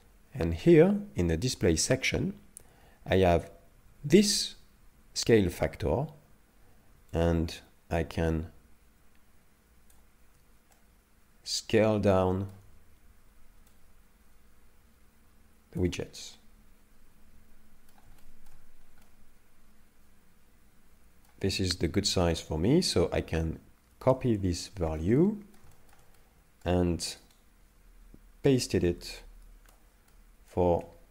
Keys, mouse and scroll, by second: 7.2 shift+click, 10.7 middle click, 13.7 shift+click, 16.2 middle click, 18.2 shift+middle click, 19.0 middle click, 23.9 ctrl+c, 24.7 shift+middle click, 25.2 middle click, 25.7 shift+middle click, 26.2 middle click, 27.3 right click, 29.6 ctrl+v, 30.1 middle click, 30.7-31.1 scroll down 3.